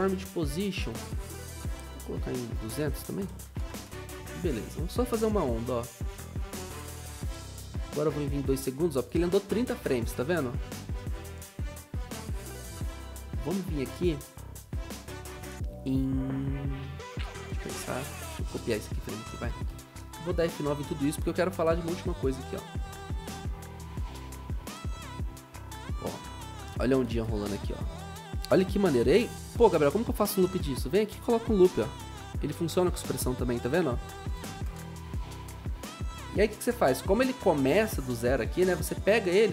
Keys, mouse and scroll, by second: 2.9-4.3 typing, 9.3-10.1 typing, 10.2 ctrl+shift+Right, 19.5 ctrl+c, 19.7 ctrl+v, 21.6 F9, 32.9 Return, 32.9 typing.